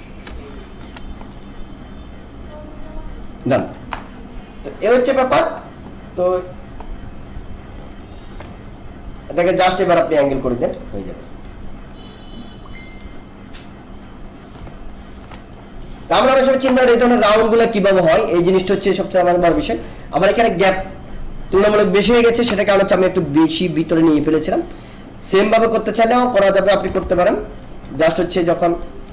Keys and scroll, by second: 27.0 ctrl+=.